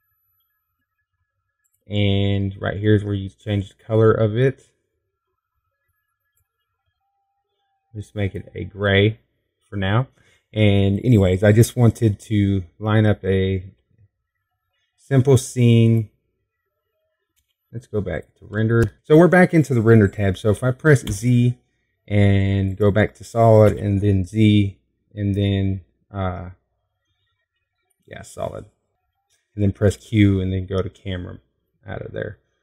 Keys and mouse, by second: 0.2 middle click, 0.3 o, 3.9-5.8 drag, 6.5 middle click, 16.2 z, 21.4-23.3 drag, 23.3 middle click, 24.8 z, 26.9 z, 31.5 q.